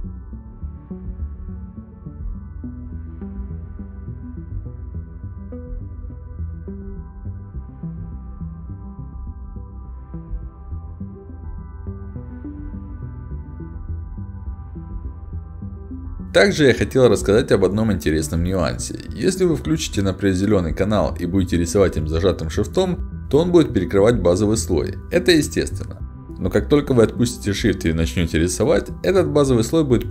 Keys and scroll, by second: 0.3 d, 3.3-5.3 typing, 6.7 e, 6.9 a, 7.9 w, 10.8 s, 13.8 w, 14.2 d, 17.2 s, 17.2 d, 19.1 w, 19.5 a, 19.8 s, 21.6 w, 21.6 d, 26.1 a, 28.6 d.